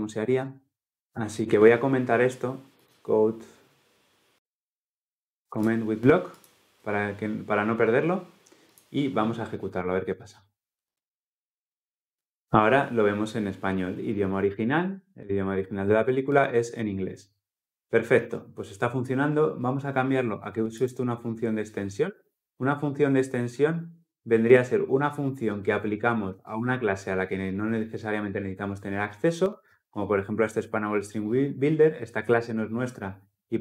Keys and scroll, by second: 5.4 ctrl+shift+/, 10.6 shift+F10.